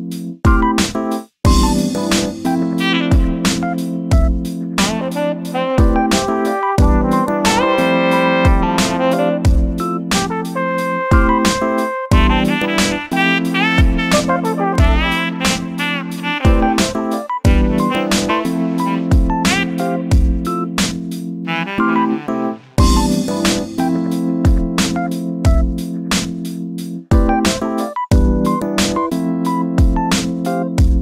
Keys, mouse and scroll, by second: 0.1 scroll up 1, 0.4 shift+middle click, 1.4 shift+d, 4.5 shift+r, 4.9 scroll down 3, 5.1 shift+middle click, 5.5-6.1 typing, 6.6-7.8 shift+middle drag, 7.8 ctrl+z, 7.9 ctrl+z, 8.0 ctrl+z, 8.8 ctrl+z, 10.1 shift+d, 11.9 click, 12.4 g, 14.2 click, 14.6 g, 15.6 click, 16.3 shift+d, 18.9 shift+d, 22.8 shift+r, 23.2 shift+r, 23.6 shift+r, 24.0 shift+middle click, 24.8 shift+r, 25.3 shift+r, 25.9 1, 26.5 click, 27.7 g, 29.5-30.2 scroll down 2, 30.2-31.0 shift+middle drag.